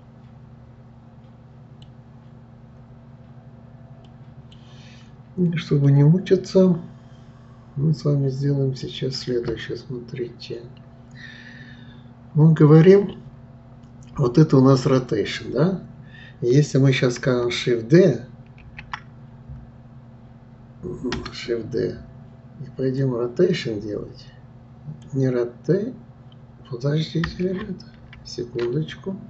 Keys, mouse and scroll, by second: 4.0-4.7 middle drag, 4.7-5.4 scroll down 1, 5.4-5.9 scroll down 1, 5.9-8.9 middle drag, 18.6 shift+d, 23.0-26.0 drag, 28.1 ctrl+z, 28.9-29.2 middle drag.